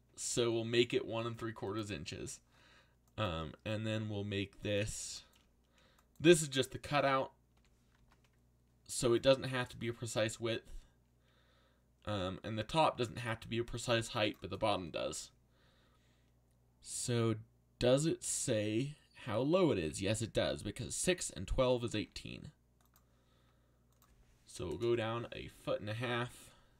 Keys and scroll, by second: 2.1 z, 6.8 z, 7.5 s, 7.9 x, 12.0 z, 13.4-14.3 typing, 21.5-22.4 typing, 24.5-25.3 typing, 26.3 ctrl+z.